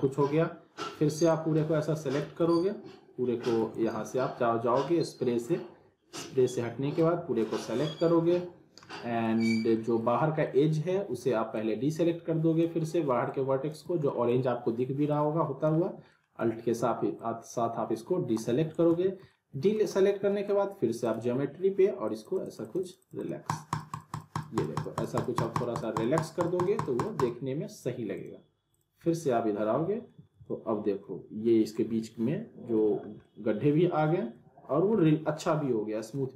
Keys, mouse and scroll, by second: 1.3 click, 2.4 z, 3.6 alt+w, 3.7 alt+right click, 3.8 alt+w, 4.4-5.4 scroll down 1, 5.8-6.7 drag, 7.7 scroll up 1, 8.9-9.5 middle click, 11.5-12.8 alt+drag, 14.1 middle click, 15.1 middle click, 15.1-15.7 alt+click, 16.1 middle click, 17.2-18.4 alt+drag, 18.5 alt+w, 18.7 alt+right click, 18.9 alt+w, 19.3-19.9 alt+middle drag, 21.0 click, 29.0-30.3 alt+middle click, 30.2 scroll up 1, 30.5-31.1 alt+middle drag, 33.0 scroll down 1, 33.2-34.5 alt+middle drag.